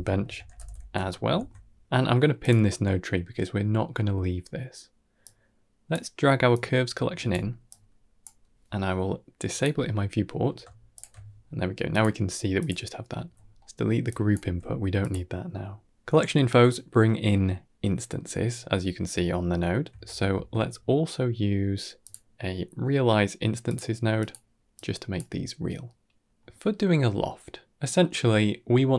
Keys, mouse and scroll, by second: 1.0 ctrl+s, 2.3 click, 5.1 click, 6.4 click, 7.6 click, 9.4 click, 10.8 alt+shift+click, 11.8 click, 12.4 click, 13.1 x, 13.5 middle click, 14.0 click, 14.3 g, 16.2 middle click, 18.9 middle click, 19.3 ctrl+middle click, 20.4 shift+a, 24.8 click, 27.4-28.6 middle drag.